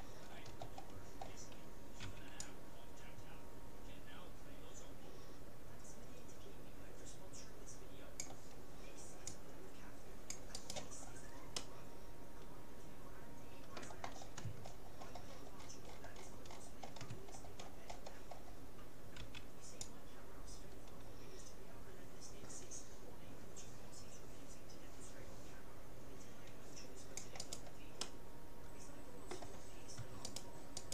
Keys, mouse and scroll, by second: 2.1 c, 11.0-13.3 middle drag, 14.3-20.3 middle drag, 19.3 c, 28.1-29.7 middle drag, 30.3-30.9 right drag.